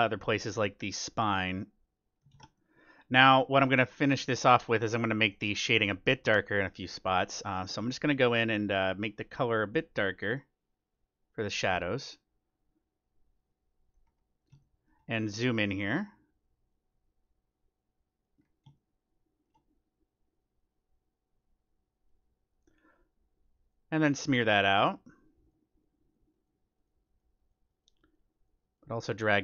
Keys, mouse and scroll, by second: 1.6-3.3 drag, 2.3 ctrl+z, 2.5-5.9 middle drag, 7.0-8.8 drag, 9.0-10.7 drag, 10.9-12.6 drag, 13.4-15.1 drag, 14.0-16.8 middle drag, 16.7-18.5 drag, 18.4-20.4 middle drag, 20.6-22.5 drag, 22.6-24.5 drag, 24.2-25.8 middle drag, 24.7-29.4 drag, 29.1-29.4 middle drag.